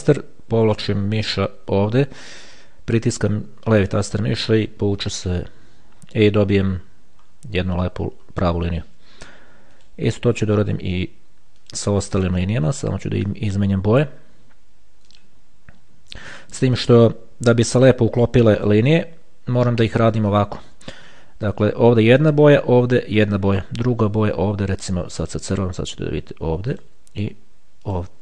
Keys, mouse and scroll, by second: 4.1 shift+click, 7.0-8.0 ctrl+scroll up 2, 8.0-8.9 ctrl+scroll down 2, 10.0 click, 11.9 click, 13.5 click, 15.3 shift+click, 16.5 shift+click, 18.8 click, 20.5 shift+click, 25.4 click, 26.9 shift+click, 28.1 shift+click.